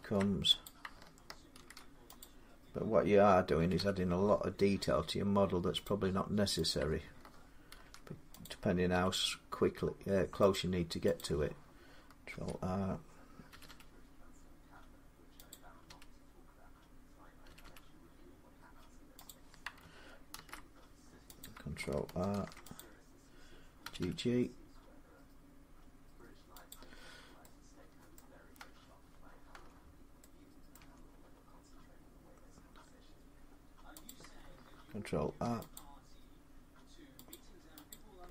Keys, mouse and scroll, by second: 0.4 click, 0.6 typing, 1.3 ctrl+r, 2.0 click, 3.4 typing, 5.6 click, 6.5 click, 7.5 ctrl+r, 8.2 click, 8.3-8.9 typing, 10.3 click, 11.1 click, 12.1 ctrl+r, 13.3-13.7 typing, 15.3 click, 15.7 g, 17.2 g, 17.8 g, 19.0 click, 20.1 ctrl+z, 20.8 typing, 21.2 click, 22.1 ctrl+r, 22.5 click, 23.6 typing, 26.5 click, 27.9 middle click, 29.3 Tab, 30.5 middle click, 30.6 Tab, 33.8 click, 35.0 ctrl+r, 35.5 click, 37.1 click, 37.8 click.